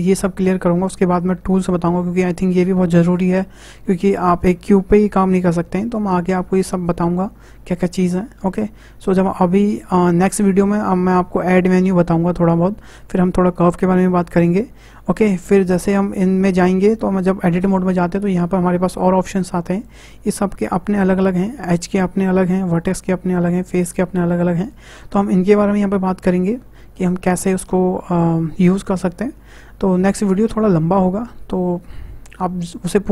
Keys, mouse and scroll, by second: 19.8-21.9 drag, 22.7 click, 23.7 click, 24.6 click, 25.0 click.